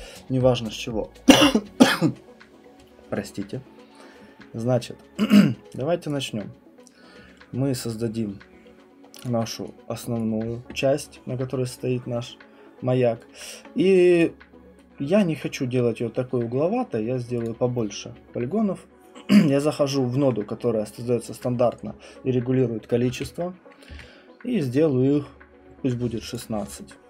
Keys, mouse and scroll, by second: 6.1 right click, 9.2 click, 10.2 right click, 13.4 right click, 14.2 click, 15.2 right click, 17.4 click, 22.6-23.6 typing, 23.9 Return, 26.3 click.